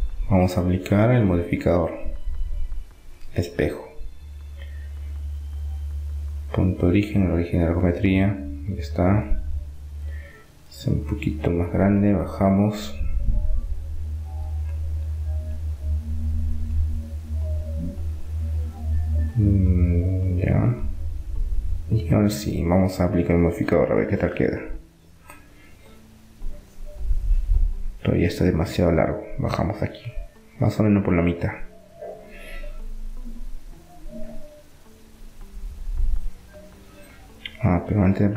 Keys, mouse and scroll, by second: 3.8 Tab, 4.0-5.8 middle drag, 6.8-8.7 drag, 9.8 s, 13.1-16.8 drag, 17.8 middle click, 19.5-20.8 drag, 20.8 middle click, 24.2 KP_1, 25.5 KP_3, 25.8-29.1 middle drag, 27.2 Tab, 29.1-30.8 drag, 32.0 Tab, 32.0-34.2 middle drag, 34.5 Tab, 37.5-38.3 middle drag.